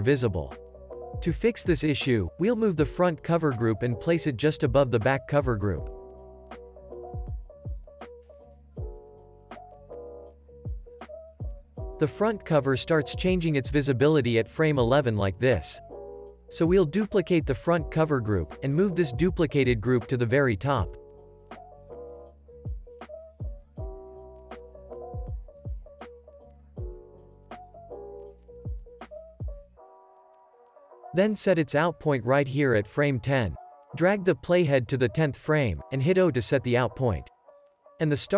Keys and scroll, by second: 6.8 super+[, 7.7 super+[, 8.6 super+[, 10.0 super+s, 15.1 alt+x, 18.9 super+d, 21.6 super+], 23.4 super+[, 31.5 alt+x, 32.1 alt+z, 36.3 o.